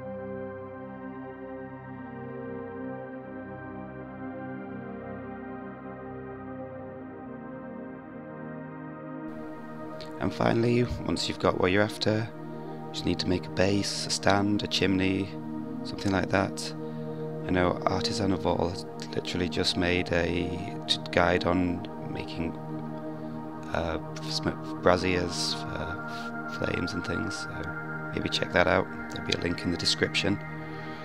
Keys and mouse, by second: 0.2 middle drag, 0.8 Tab, 1.0 a, 1.2 p, 1.9 Tab, 2.1 click, 4.0 h, 4.4 a, 4.8 x, 5.6 middle drag, 5.8 alt+h, 6.1 middle click, 6.3 middle click, 6.6-7.5 middle drag, 9.6-10.6 drag, 11.4-13.0 typing, 13.6-13.9 drag, 15.2 click, 15.7 middle click, 16.1 KP_1, 16.4 shift+middle click, 16.5 click, 16.8 click, 17.4 g, 18.0 g, 18.5 click, 18.7 g, 19.4 shift+click, 19.8 g, 23.1 shift+click, 24.0 Tab, 24.1 click, 24.4 3, 24.4 click, 24.6 KP_1, 25.1 g, 26.3 shift+click, 26.6 Tab, 26.8 s, 27.7 middle click, 28.9-29.2 middle drag, 30.7 Tab.